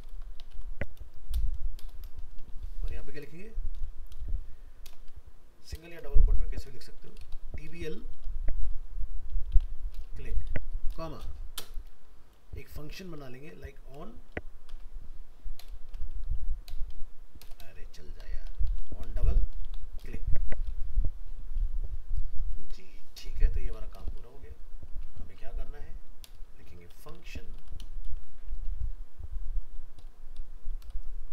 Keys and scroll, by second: 25.3 ctrl+x, 28.1 ctrl+v, 30.9 shift+Left.